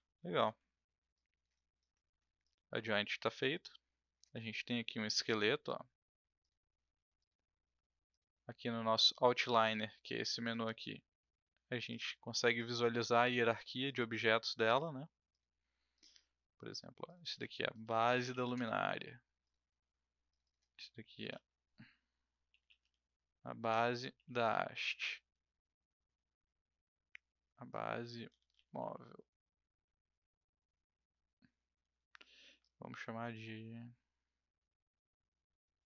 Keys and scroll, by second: 0.4 w, 0.5 w, 17.6-18.9 typing, 21.2 b, 22.2-24.1 typing, 25.3 BackSpace, 28.0-29.2 typing, 31.4 BackSpace, 31.8 BackSpace, 32.0 BackSpace, 33.0 BackSpace.